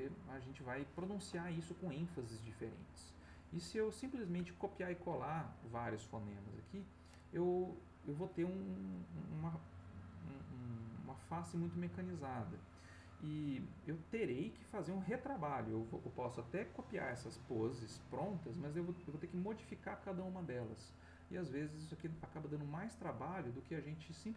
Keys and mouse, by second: 22.7-24.3 drag.